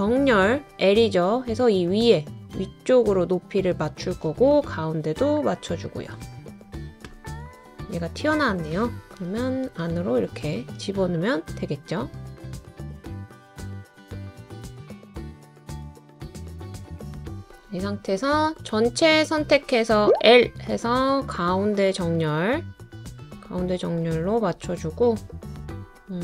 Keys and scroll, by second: 8.6 Left, 8.9 Left, 20.1 i.